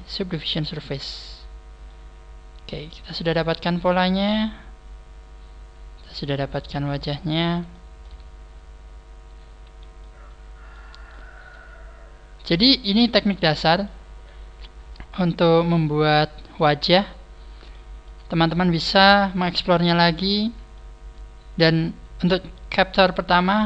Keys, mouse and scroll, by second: 1.8 middle click, 3.3 shift+middle click, 4.0 shift+middle click, 4.9 shift+middle click, 6.5 middle click, 7.6 shift+middle click, 8.2-8.6 scroll down 5, 8.8-9.2 scroll up 3, 9.6 a, 9.9 middle click, 11.0 shift+scroll up 1, 11.1 shift+middle click, 11.7 shift+scroll up 2, 13.0 shift+middle click, 13.7 shift+middle click, 15.8 shift+middle click, 17.0 scroll down 5, 17.0 a, 17.6 shift+middle click, 18.2-18.6 scroll down 1, 18.9 shift+middle click, 19.8 shift+middle click, 20.3 scroll down 1, 20.6 shift+middle click, 23.4 middle click.